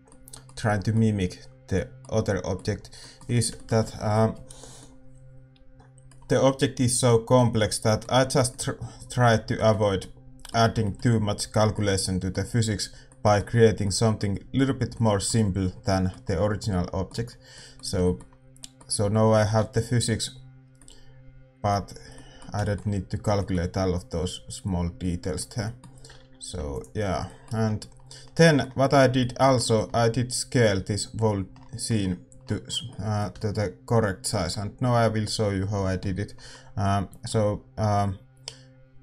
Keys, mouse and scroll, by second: 5.4-39.0 middle drag.